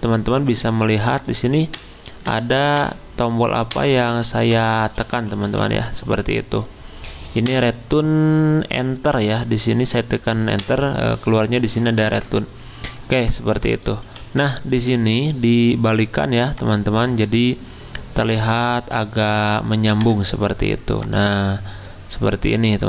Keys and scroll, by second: 1.8 Return, 2.3 Return, 2.8 Return, 3.7 Return, 4.8-6.1 typing, 7.5 Return, 10.6 Return, 14.1 v, 20.0 Return.